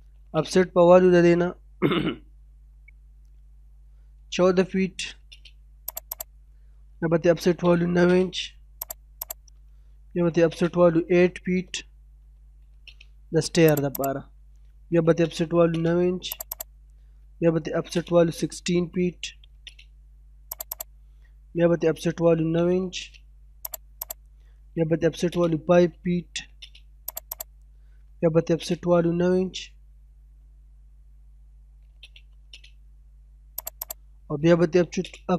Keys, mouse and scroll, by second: 0.1 o, 0.3 space, 1.1 middle click, 3.0-3.4 scroll up 1, 3.4 middle click, 4.1 typing, 5.3 space, 5.9 click, 6.5-7.4 scroll down 1, 7.4 o, 7.5 space, 7.8 9, 8.0 space, 9.0 click, 10.2 o, 10.4 space, 11.0 7, 12.8 space, 13.7 click, 15.0 o, 15.1 space, 15.5 9, 15.7 space, 16.3 click, 17.7 o, 17.9 space, 18.1 1, 19.6 space, 20.5 click, 21.0 scroll down 1, 21.3 middle click, 22.3 o, 22.4 space, 22.8 9, 22.9 space, 23.7 click, 25.0 o, 25.2 space, 25.8 5, 26.5 space, 27.1 click, 28.1-28.9 typing, 31.7 o, 31.9 space, 32.2 9, 32.5 space, 33.6 click, 34.8 o, 34.9 space.